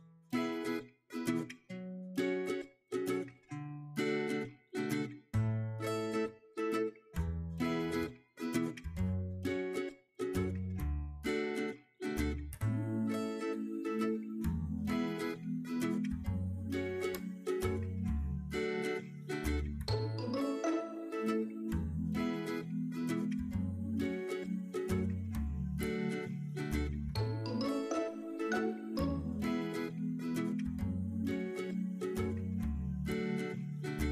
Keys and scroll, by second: 5.8 super+v, 8.9 super+Tab, 15.7 super+Tab, 21.2 super+Tab, 27.4 super+c, 27.7 super+Tab, 29.3 super+v, 30.5 super+Tab, 33.4 super+c, 33.7 super+Tab.